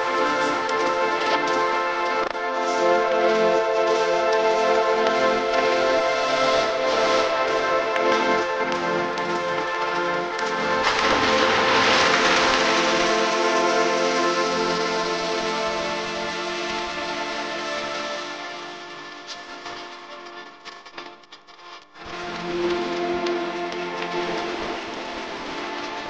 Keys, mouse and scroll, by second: 1.7 Up, 3.2 double click, 3.9 Up, 6.4 Up, 15.1 Up, 15.4 Up, 15.8 Up, 16.5 Right, 17.1 Up, 17.3 Up, 17.6 Up, 17.9 Up, 18.2 Up, 18.4 Up, 19.0 Right, 19.7 Right.